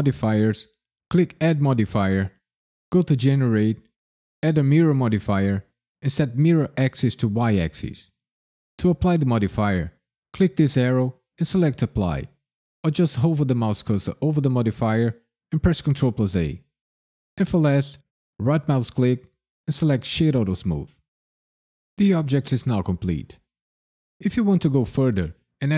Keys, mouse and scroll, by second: 0.2 click, 1.4 click, 6.3 click, 7.3 click, 10.6 click, 18.3 right click, 21.5 click.